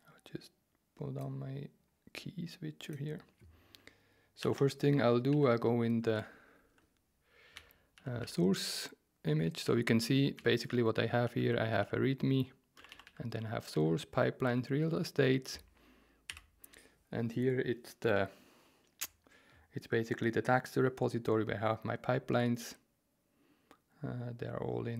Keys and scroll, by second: 4.4-13.7 typing, 4.5 Return, 16.3 q.